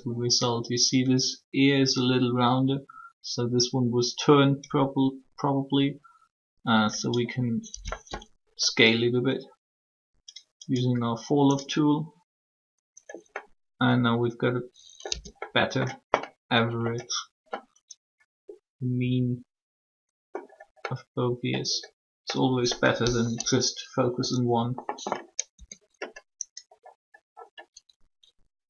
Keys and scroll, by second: 7.7 s, 15.1 Tab, 24.1 3, 25.5 Tab.